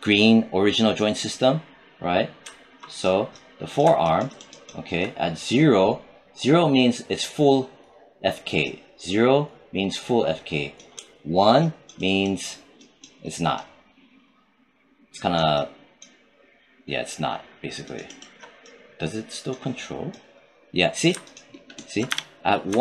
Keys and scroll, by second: 21.9 z.